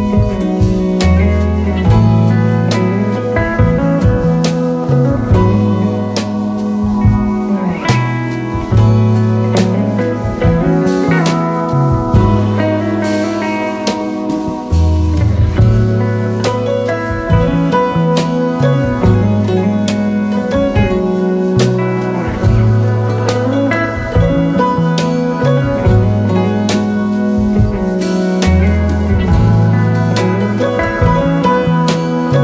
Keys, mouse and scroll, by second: 0.0 click, 3.3 ctrl+Num_Lock, 3.3 click, 4.0 ctrl+j, 5.7 ctrl+z, 9.1 click, 15.2 Left, 15.2 BackSpace, 18.0-18.7 typing, 18.4-22.2 alt+drag, 22.0-22.8 typing.